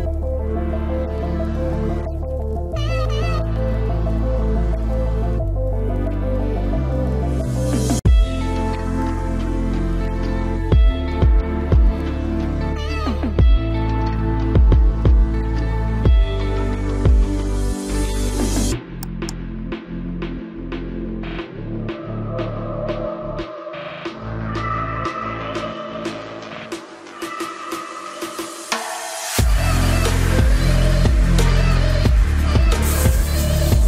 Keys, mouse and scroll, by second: 0.7 c, 6.0 right click, 6.3 z, 6.6-7.7 middle drag, 7.7-9.0 drag, 9.0 KP_3, 9.1 right click, 9.3 Tab, 9.9 ctrl+s, 10.4 z, 14.1 Tab, 15.1-16.8 drag, 15.5 c, 18.2-21.9 drag, 19.0 c.